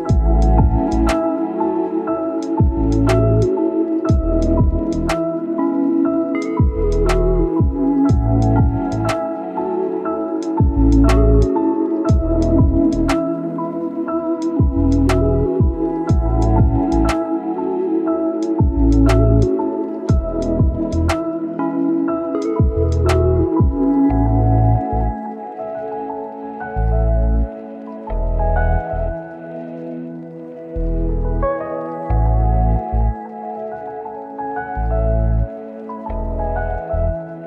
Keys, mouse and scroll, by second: 5.0 scroll down 1, 6.1 scroll up 1, 6.4 right click, 7.6 scroll down 1, 7.9-10.4 scroll up 1, 12.1 click, 12.5 scroll down 1, 12.7 right click, 13.0-13.5 scroll up 1, 13.5 click, 14.2 right click, 15.5 click, 15.8 right click, 16.4 click, 17.5-18.0 scroll up 1, 18.0 click, 18.5 scroll down 1, 18.8 right click, 19.4 scroll up 1, 19.6 right click, 20.3 click, 21.8 right click, 22.0 scroll down 1, 22.1-24.8 scroll up 2, 22.2 right click, 24.8 click, 25.6 scroll down 1, 25.8 right click, 26.5 click, 27.1-27.6 scroll up 1, 27.6 click, 28.6 scroll down 1, 28.7-29.5 scroll up 1, 29.5-32.7 drag, 32.7 scroll down 1, 32.8 scroll up 1, 33.0 click, 33.6 scroll down 1, 33.7-34.2 scroll up 1, 34.2 click, 36.3-36.6 scroll down 1, 36.6-37.2 scroll up 1, 37.2 click.